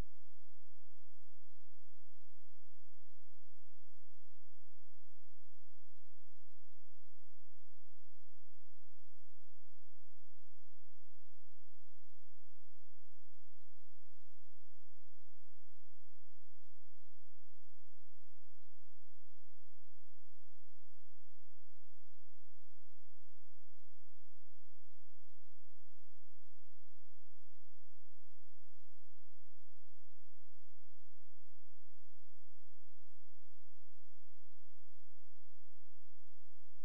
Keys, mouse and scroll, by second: 3.5 shift+space, 3.7 shift+click, 7.3 c, 9.3 click, 13.3 ctrl+space, 14.4 click, 20.3 ctrl+q, 20.6 click, 22.7 space, 23.4 shift+click, 27.9 click, 29.1 right click, 29.9 click, 33.3 Caps_Lock, 33.4-34.6 typing, 35.9 click.